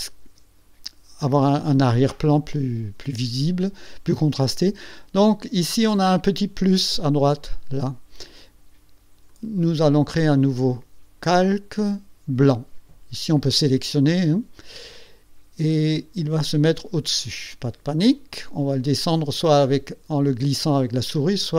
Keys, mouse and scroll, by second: 0.7 ctrl+scroll up 2, 2.8-3.1 ctrl+scroll down 2, 9.4 click, 11.3 click, 15.7 click.